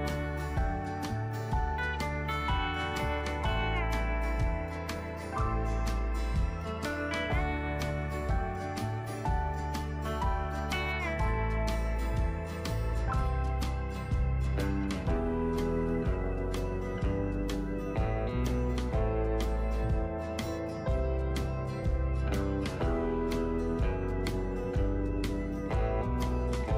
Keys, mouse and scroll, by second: 0.0-10.9 drag, 12.6-24.0 drag, 24.1 right click, 25.6-26.7 drag.